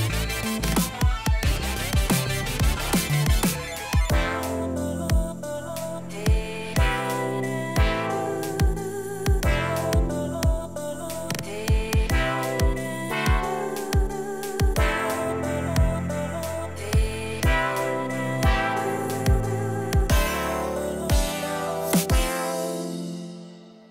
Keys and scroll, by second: 11.3 Up.